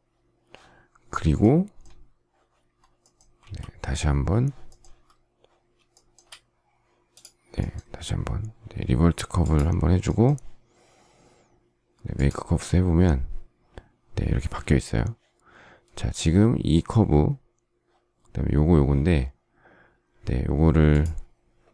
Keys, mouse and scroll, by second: 3.2 ctrl+a, 5.7 shift+middle click.